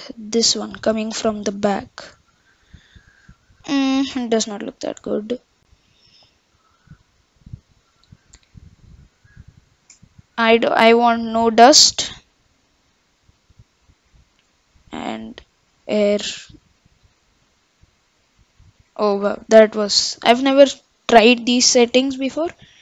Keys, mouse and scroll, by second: 10.9-13.9 drag, 15.7-18.8 drag, 20.2 ctrl+z, 21.6-22.8 drag.